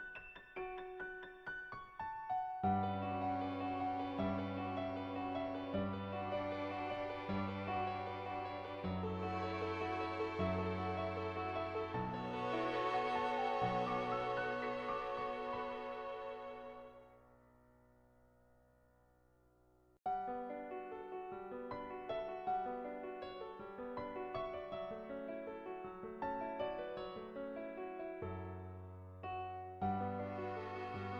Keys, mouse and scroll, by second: 1.3 [, 1.8-2.9 drag, 6.0 ], 6.2 ], 6.3 click, 6.9 ctrl+z, 9.0 click, 10.4 ctrl+z, 11.3 ], 11.6 click, 12.3 ctrl+z, 12.6 click, 13.1 click, 13.8 [, 14.0 [, 14.8 ctrl+z, 15.7 [, 15.8 [, 16.1 click, 16.6 [, 16.7 click, 17.3 ctrl+z, 17.7 click, 18.6 [, 19.7 click, 20.6-21.8 drag, 25.3 [, 25.5 click, 26.5 ], 26.7 click, 27.3 ctrl+z, 27.5 ], 27.8 click, 28.4 [, 28.6 click, 30.8-31.1 drag.